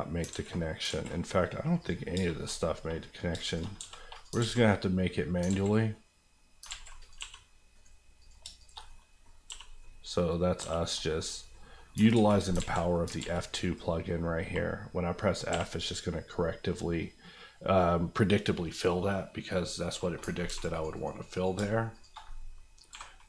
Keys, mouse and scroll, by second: 0.2 alt+middle click, 0.3 alt+z, 0.7 middle click, 0.8 alt+middle click, 0.8 alt+z, 1.1 alt+middle click, 1.8 click, 2.1 shift+click, 2.4 middle click, 3.3 shift+middle click, 3.5 shift+click, 3.6 click, 3.7 x, 4.1 click, 4.3 alt+click, 4.4 alt+z, 5.1 scroll down 1, 5.1 middle click, 5.4 alt+middle click, 5.4 alt+z, 6.6 alt+z, 7.0 click, 7.2 g, 7.7 right click, 8.2 click, 8.4 shift+click, 8.7 click, 8.8 middle click, 9.5 f, 9.8 middle click, 10.6 f, 10.9 middle click, 11.2 scroll up 1, 11.5 middle click, 11.9 scroll up 2, 12.1 ctrl+z, 13.1 ctrl+z, 14.0-15.2 scroll down 1, 15.5 f, 19.0 scroll down 1, 19.8-20.4 scroll down 2, 20.7 click, 20.9 right click, 21.3 click, 21.5 shift+click, 22.2 click, 22.9 j.